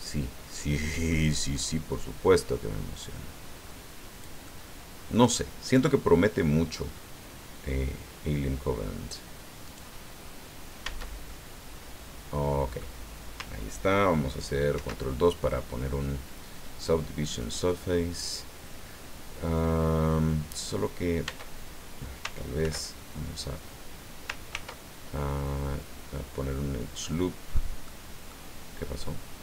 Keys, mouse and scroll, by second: 0.0-1.3 middle drag, 2.4-4.4 drag, 4.5-5.5 middle drag, 5.9 scroll down 2, 6.7-7.1 scroll up 2, 9.6 right click, 10.8 Tab, 11.3-12.9 drag, 14.7 ctrl+2, 15.5-17.8 drag, 21.3 Tab, 22.6 ctrl+r, 24.5 ctrl+r, 27.0 click, 27.8 click.